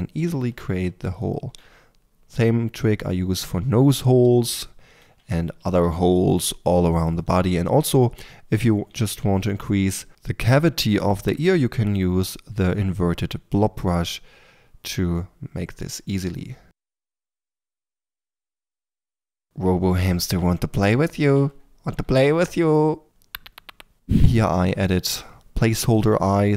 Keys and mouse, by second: 5.1-7.6 middle drag, 5.5 f, 7.6 click, 7.7-8.2 middle drag, 9.2 f, 12.8-16.3 drag, 16.8-17.3 drag, 17.3-18.6 typing, 18.3 click, 18.9-20.8 drag, 20.8-22.8 middle drag, 24.3 3, 24.6 Tab, 25.2 r, 25.4 Tab, 26.5 ctrl+..